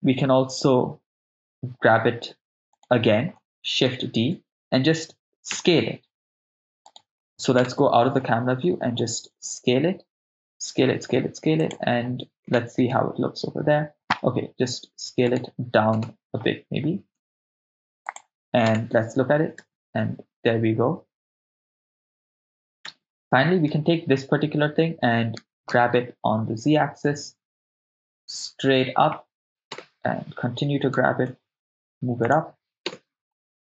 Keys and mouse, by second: 2.8 right click, 3.9 shift+d, 4.2 Return, 5.6 s, 6.9 right click, 7.6 KP_0, 9.3 s, 11.6 click, 12.5 KP_0, 14.7 s, 15.2 click, 15.2 right click, 16.0 KP_0, 17.2 s, 18.0 click, 18.7 KP_0, 19.6 shift+space, 22.8 shift+space, 25.4 shift+d, 25.7 z, 29.4 click, 29.4 right click, 29.4 g, 29.4 z, 29.7 KP_0, 31.0 g, 31.2 z, 32.2 click, 32.9 KP_0.